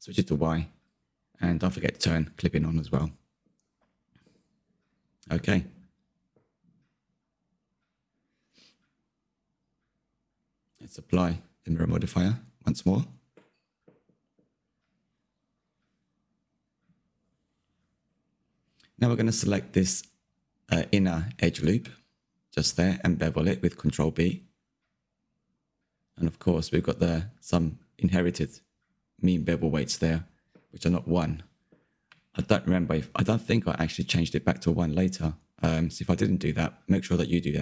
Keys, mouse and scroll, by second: 1.0 click, 1.3 click, 2.9-4.2 middle drag, 4.2 click, 5.4-7.4 middle drag, 7.4 click, 8.2-8.6 middle drag, 8.6 Tab, 8.8 scroll up 3, 9.0 middle click, 9.4 scroll down 1, 9.4-11.0 shift+middle drag, 11.0 click, 11.8 Tab, 13.8-14.4 drag, 14.4 Tab, 16.2 3, 18.7 middle click, 19.1-22.1 scroll up 2, 22.1 ctrl+b, 29.5-31.2 middle drag, 31.2-32.0 scroll up 1, 32.0 3, 32.6-36.1 scroll up 1, 36.1 alt+e.